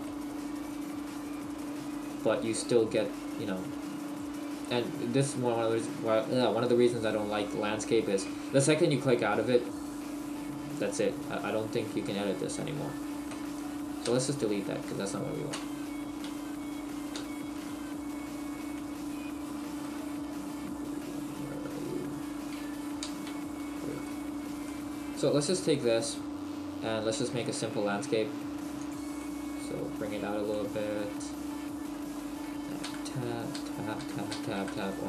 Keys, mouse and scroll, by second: 1.0 Tab, 1.6 middle click, 4.2 right click, 7.3 middle click, 14.9 scroll up 1, 15.5 KP_1, 17.2 KP_5, 17.6 KP_3, 18.3-19.3 scroll up 4, 18.7 middle click, 19.8 KP_Decimal, 21.3-21.6 scroll down 1, 21.8-23.0 scroll up 2, 23.0 alt+h, 24.0 KP_Decimal, 24.7 middle click, 25.7-26.3 scroll up 1, 26.3 middle click, 26.3-27.1 scroll down 1, 27.1 s, 28.9 click, 29.2 middle click, 30.0 scroll down 1, 30.5 middle click, 32.8-34.9 Tab, 34.9 right click.